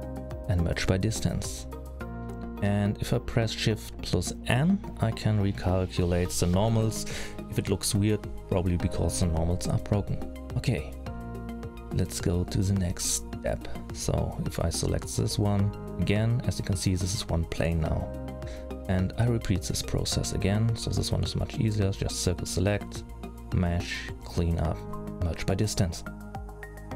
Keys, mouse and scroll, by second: 1.5 middle click, 4.1 shift+n, 4.8-5.3 scroll up 2, 5.3-5.7 scroll up 1, 5.7 middle click, 9.5 alt+a, 13.8 l, 14.5 middle click, 15.1-15.4 scroll down 3, 15.4 scroll up 4, 15.8 middle click, 16.8 h, 17.2 middle click, 17.9-18.7 scroll down 3, 18.4 middle click, 18.7 c, 23.2 click, 26.0-26.7 scroll up 3.